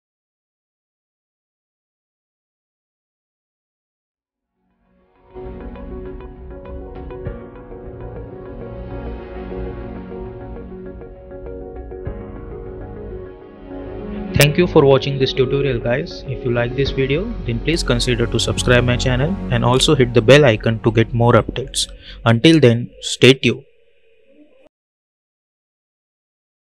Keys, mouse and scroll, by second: 2.3 space, 2.6 click.